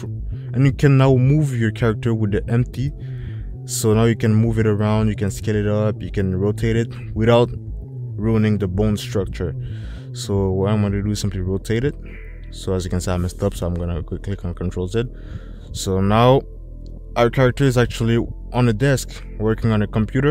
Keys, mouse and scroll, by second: 1.4 click, 4.0 click, 5.5 middle click, 7.4 click, 10.7 drag, 13.3 ctrl+z.